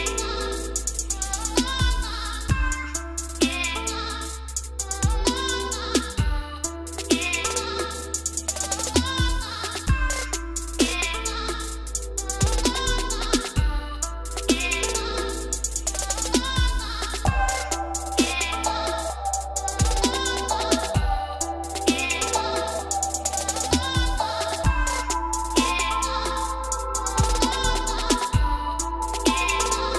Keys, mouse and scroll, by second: 0.0-1.1 scroll up 16, 1.1 e, 1.4 click, 1.5 click, 2.5 ctrl+z, 2.9 scroll down 1, 3.0-4.2 scroll, 4.2 ctrl+z, 4.7-5.2 scroll, 6.1-7.4 scroll down 11, 7.4-8.3 scroll up 4, 8.8 scroll up 1, 8.8 l, 9.9 click, 11.7 click, 12.3 e, 12.6-13.2 scroll up 2, 13.2-14.1 scroll up 14, 14.2 click, 14.5-15.3 scroll down 6, 15.3 click, 16.0 click, 16.7-17.1 scroll up 5, 17.5 click, 18.1 scroll down 3, 18.3 scroll up 1, 18.4-20.0 scroll down 13, 20.0-20.6 scroll up 2, 20.6 click, 22.8-23.9 scroll up 2, 24.1-24.9 scroll down 2, 24.9 t, 25.3-26.4 scroll up 7, 26.8 click, 28.2 typing, 28.7 Return, 29.6-29.9 scroll down 10.